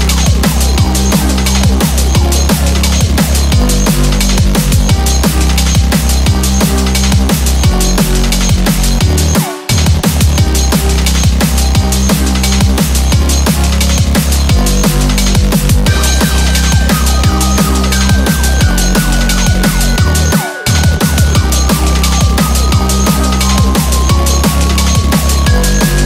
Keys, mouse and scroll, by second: 0.0 middle click, 0.1 alt+z, 0.1 middle click, 0.1 click, 0.1 scroll down 7, 0.2 middle click, 0.6-0.9 scroll up 5, 0.8 middle click, 1.7 scroll up 2, 1.9 middle click, 5.0 middle click, 6.9-7.3 scroll down 7, 7.3 middle click, 9.1 KP_1, 9.3 alt+z, 9.6 scroll up 4, 10.1 shift+middle click, 10.6-11.0 scroll up 1, 11.3 scroll down 3, 11.5 middle click, 12.0 click, 13.1 ctrl+click, 14.7 KP_1, 15.1 scroll up 2, 15.8 g.